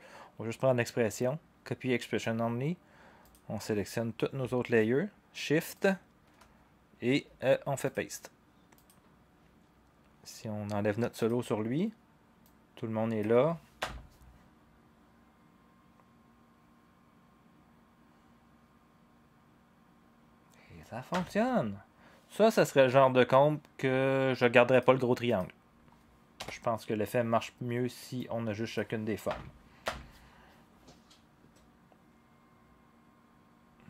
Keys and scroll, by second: 13.8 0, 21.1 0, 26.3 Delete, 29.8 0.